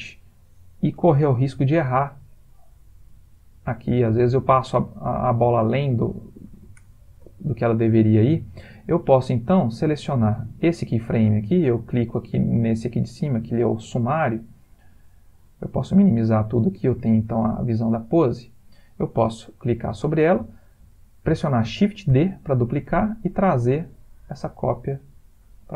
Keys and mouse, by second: 1.1 g, 7.0 ctrl+z, 8.3 click, 10.1 click, 11.4 middle click, 12.5 click, 14.3 click, 15.8 click, 17.0 click, 18.7 click, 22.1 shift+d.